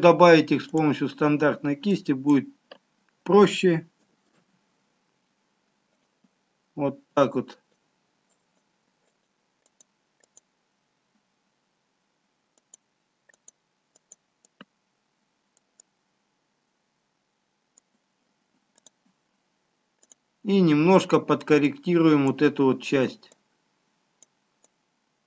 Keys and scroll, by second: 4.6 ctrl+z.